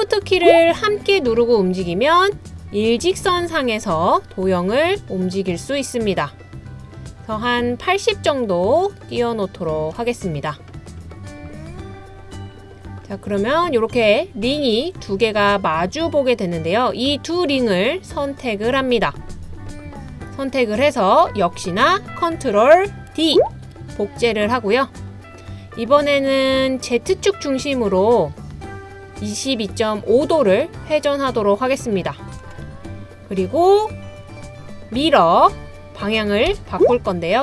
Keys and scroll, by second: 23.5 super+d, 36.5 m.